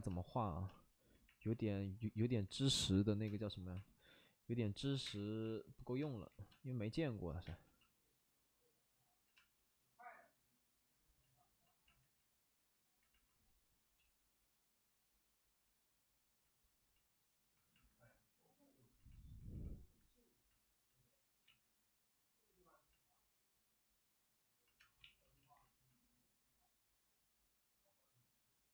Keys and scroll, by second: 0.1 space, 3.2 space, 4.9 s, 5.0 space, 5.0 5, 6.0 space, 6.2 ctrl+z, 7.0 space, 7.1 space, 21.4 ctrl+z, 24.8 space, 25.0 ctrl+z, 25.1 ctrl+z, 25.3 ctrl+z.